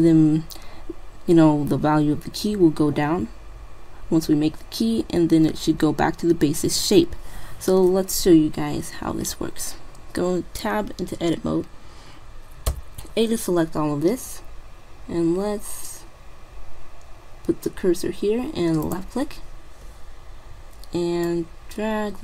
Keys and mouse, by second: 9.4 Tab, 12.8 a, 19.0-20.8 drag, 21.4-22.2 drag.